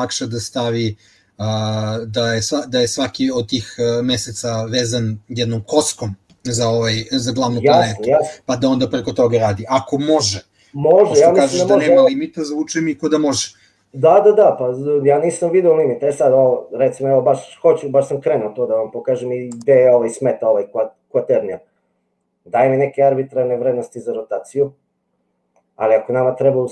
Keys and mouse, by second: 22.6-26.7 drag.